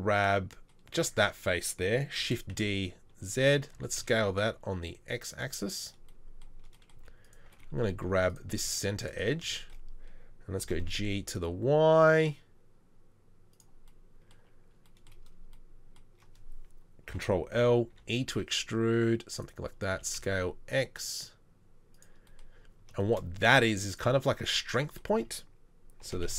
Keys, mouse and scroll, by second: 2.2 shift+d, 3.8 s, 7.0 z, 8.0 2, 8.7 z, 10.6 g, 17.1 ctrl+l, 17.9 e, 19.9 s, 26.0 g.